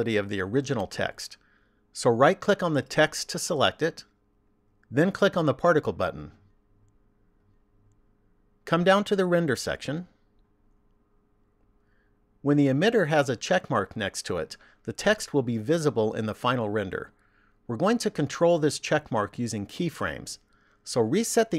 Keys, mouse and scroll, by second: 2.8 right click, 6.8 click, 9.5 click.